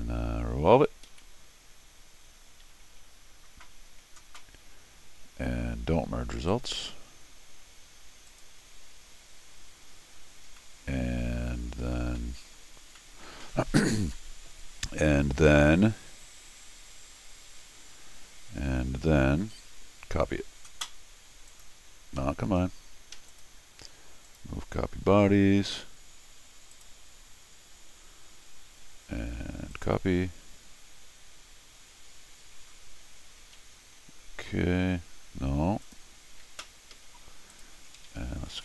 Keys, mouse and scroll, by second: 1.1 ctrl+v, 6.5 ctrl+click, 8.3 ctrl+click, 9.4-10.3 ctrl+scroll down 4, 10.6 ctrl+middle click, 12.2 ctrl+middle click, 12.9 ctrl+scroll up 2, 13.0 ctrl+scroll down 2, 21.5 ctrl+click, 22.2 ctrl+Escape, 22.5 ctrl+Escape, 23.1 ctrl+Escape, 23.3 ctrl+click, 24.3 ctrl+click, 26.7 ctrl+click, 29.7 ctrl+click, 35.8 ctrl+click, 36.9 ctrl+Escape, 37.5 ctrl+click, 38.5 ctrl+alt+r.